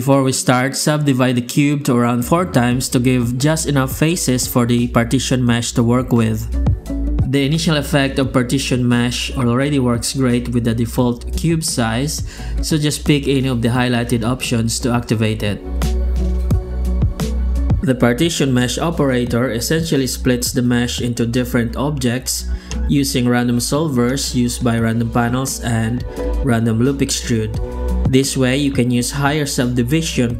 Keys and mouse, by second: 0.7 Tab, 1.6 w, 3.0 F9, 5.7 Tab, 6.0 shift+q.